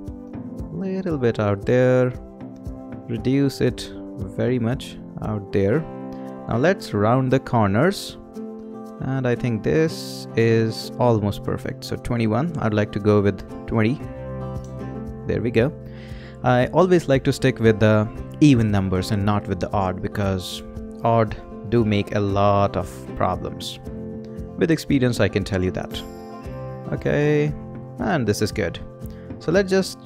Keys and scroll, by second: 13.8-14.6 typing.